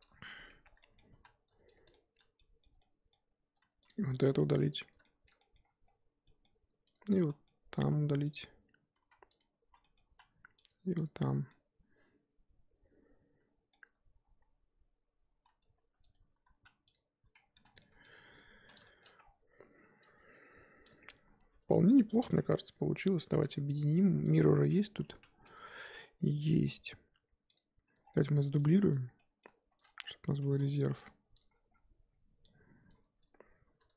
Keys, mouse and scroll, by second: 0.4 scroll up 3, 0.6 Tab, 0.8 middle drag, 1.0 scroll up 1, 1.1 z, 1.9-3.8 shift+middle drag, 3.8 click, 4.6 x, 4.8 scroll down 4, 5.0-5.6 shift+middle drag, 5.6 scroll up 1, 6.2 scroll up 5, 6.2-6.9 middle drag, 6.9 click, 7.2 z, 7.2-7.8 middle drag, 7.8 z, 8.4 click, 9.4 x, 9.8 middle click, 10.0 z, 10.6 click, 11.0 click, 11.4 z, 11.5-14.0 middle drag, 14.0 scroll up 2, 14.2 z, 14.9 z, 15.4 z, 15.8 s, 16.9 x, 17.3-17.8 scroll down 5, 17.5 Tab, 17.9-18.4 middle drag, 18.4 click, 18.6 z, 18.8-19.2 shift+middle drag, 19.2-20.1 scroll down 4, 20.4 click, 20.9 click, 22.7-24.8 scroll up 2, 25.5 click, 28.0-28.4 scroll down 3, 28.6 drag, 29.0 scroll down 1, 29.2-29.7 middle drag, 29.7 shift+d, 30.0-30.4 scroll down 1, 30.4 g, 31.4 click, 31.5-32.4 scroll up 10, 32.9 click, 33.0 scroll up 1.